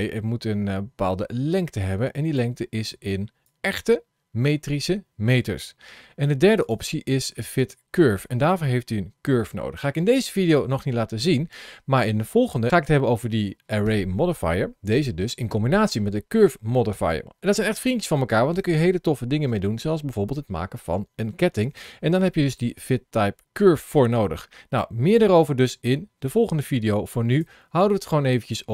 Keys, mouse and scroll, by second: 3.3 click, 6.6 click, 27.1 click.